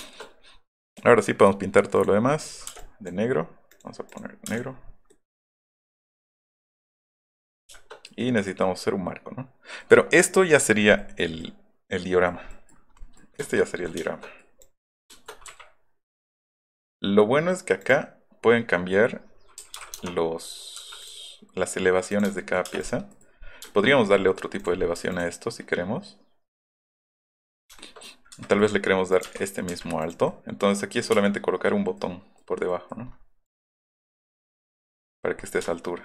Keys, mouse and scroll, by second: 0.9 click, 2.0 click, 2.3 middle click, 2.6 middle click, 2.7 space, 2.8 click, 3.7 click, 4.1 click, 4.5 space, 4.5 click, 5.1-6.3 middle drag, 6.5 middle click, 6.7 middle click, 7.2 middle click, 7.6 middle click, 8.1 middle click, 8.6-9.8 middle drag, 11.0 middle click, 12.3 middle click, 13.4-14.4 shift+middle drag, 14.6 click, 15.3 click, 15.5 q, 16.2 click, 19.8 KP_9, 19.8 KP_0, 20.0 KP_Enter, 20.8 m, 21.0 click, 22.1 click, 22.7 space, 23.2 middle click, 23.2 scroll, 23.3 middle click, 24.2 middle click, 24.6 click, 25.0 m, 27.2 middle click, 27.8 shift+middle click, 29.1 click, 29.2 Down, 29.7 Left, 29.7 Down, 33.1 middle click, 33.5 click, 34.3 middle click, 35.4 middle click, 35.7 shift+middle click.